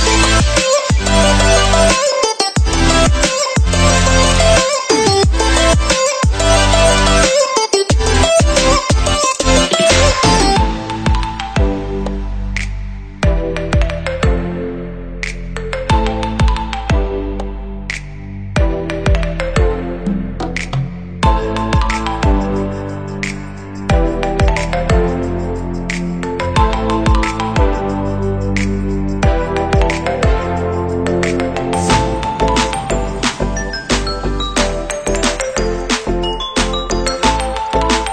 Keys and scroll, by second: 0.1 ctrl+], 0.7 ctrl+=, 7.7 Delete, 10.8 Delete, 12.9 Delete, 13.8 Delete, 14.9 Delete, 15.7 Delete, 20.3 ctrl+z, 21.0 Delete, 37.0 Delete.